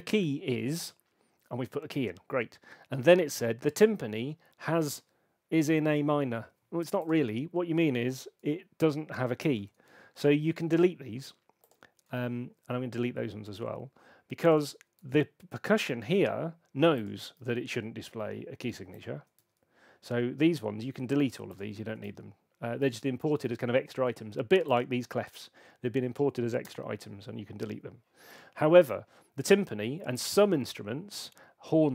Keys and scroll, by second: 9.5 BackSpace, 12.1 BackSpace, 15.0 BackSpace, 16.6 BackSpace, 17.3 BackSpace, 19.3 BackSpace, 22.0 BackSpace, 26.6 BackSpace.